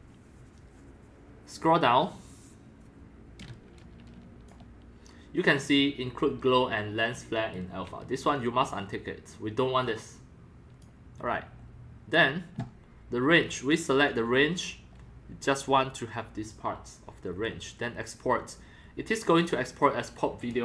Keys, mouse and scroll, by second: 1.6 click, 2.6 click, 2.7 click, 7.2-9.6 drag, 9.8-11.9 drag, 13.6 click, 14.1 click, 19.4 click.